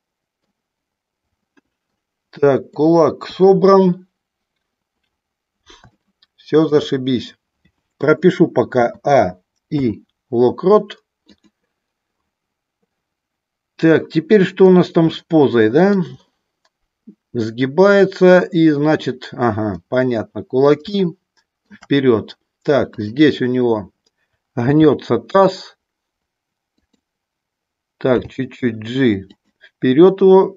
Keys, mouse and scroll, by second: 1.4 middle click, 2.5 middle click, 3.1 KP_1, 5.9 shift+middle click, 8.6 a, 9.8 i, 15.0 middle click, 19.7-21.6 middle drag, 24.6 r, 26.7 click, 28.1 g, 29.4 click.